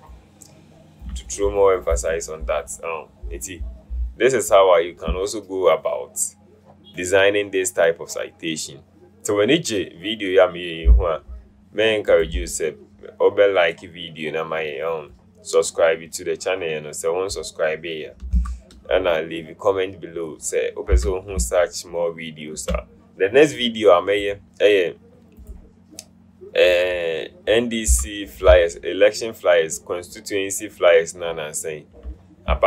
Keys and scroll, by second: 18.7 v, 21.1 v, 28.1 v, 28.6 alt+v.